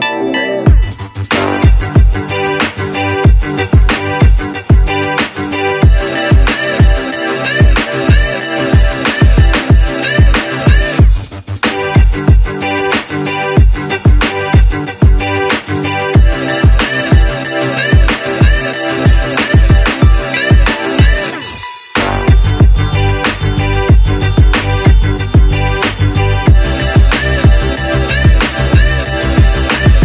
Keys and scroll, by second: 28.7 c.